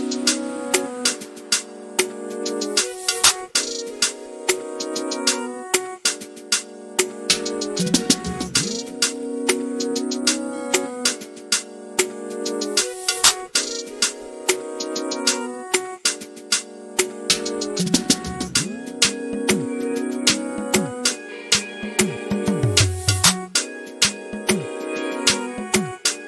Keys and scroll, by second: 19.3 typing, 19.5 Return.